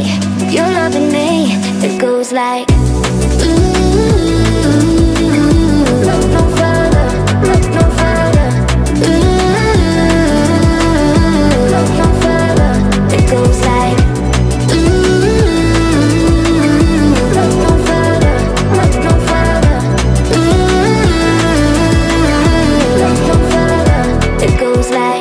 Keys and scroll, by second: 0.6 Down.